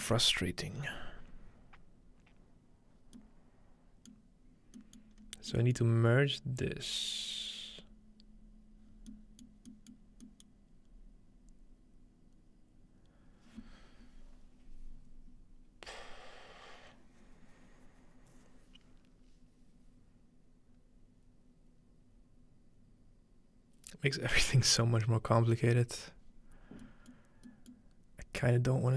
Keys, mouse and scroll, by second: 2.9 scroll down 2, 3.2-5.5 middle drag, 5.1-7.2 scroll up 2, 5.8-8.8 middle drag, 8.8-10.8 scroll down 3, 9.1 middle click, 26.8 middle click, 28.2-28.9 scroll down 3.